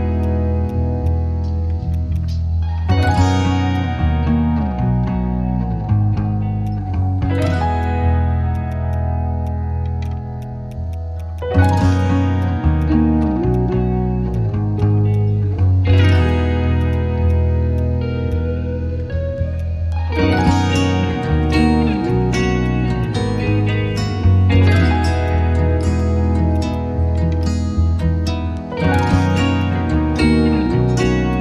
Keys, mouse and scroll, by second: 0.4 ctrl+z, 0.5 ctrl+z, 0.6 ctrl+click, 1.0 shift+click, 2.1 right click, 3.7 alt+click, 8.5 right click, 15.4 right click, 16.6 ctrl+z, 16.7 ctrl+right click, 19.9 ctrl+z, 20.1 shift+click, 23.0 shift+click, 24.0 shift+click, 25.3 shift+click, 26.5 right click, 29.6 shift+click, 31.3 shift+click.